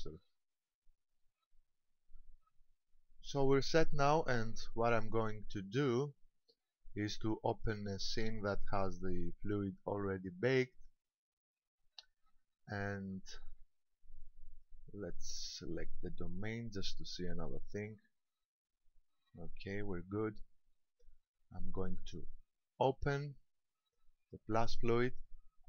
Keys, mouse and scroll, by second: 8.1 click, 14.5 right click, 15.3 right click, 17.6 click, 18.1-19.1 scroll down 2, 19.1-19.5 scroll down 1, 20.1 scroll up 1, 21.7 click.